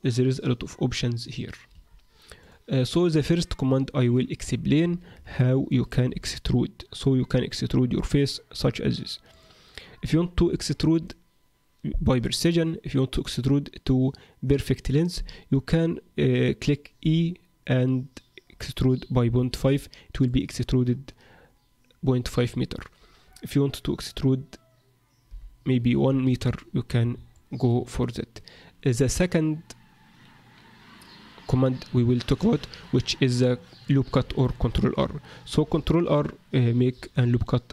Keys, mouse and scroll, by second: 1.7 Escape, 2.4 click, 5.4 shift+middle click, 6.0 e, 10.6 shift+middle click, 17.0 e, 25.2 e, 27.3 shift+middle click, 32.7-33.2 scroll down 1, 33.4 middle click, 33.4 scroll down 2, 34.4 shift+middle click, 35.5 ctrl+r.